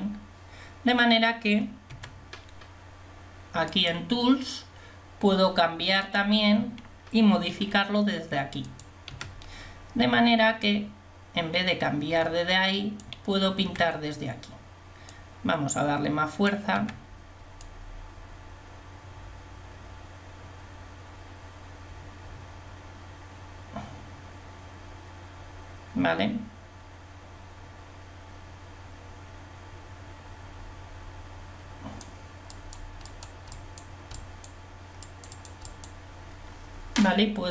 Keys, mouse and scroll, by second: 10.7 t, 17.6 t.